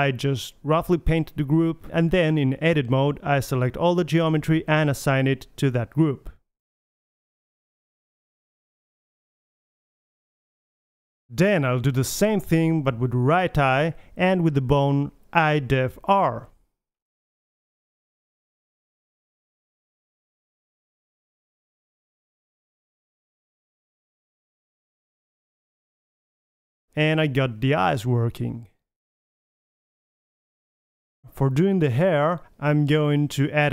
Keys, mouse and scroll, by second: 1.6 click, 2.6-4.0 middle drag, 4.3 Tab, 4.6 a, 4.8 a, 4.9 click, 5.7 click, 7.0 click, 8.9 Tab, 9.4-10.5 middle drag, 12.7 middle drag, 13.0-14.0 drag, 13.2-14.0 middle drag, 14.3 drag, 14.5 click, 14.6 typing, 15.0 click, 15.3-15.7 middle drag, 15.7-17.7 drag, 17.7-18.0 middle drag, 18.7-20.9 drag, 21.4 click, 21.6-22.2 middle drag, 22.7 Tab, 22.8 a, 22.9 a, 24.9 Tab, 25.3 drag, 25.7 click, 26.9 KP_1, 27.0 drag, 27.1-27.6 middle drag, 27.3 g, 28.8 middle click, 29.0-30.4 middle drag, 29.2 KP_3, 31.4-31.7 right drag, 31.9 click, 32.1 middle click, 32.2 right click, 32.6 h, 32.7 middle click, 33.1 right click, 33.4 click.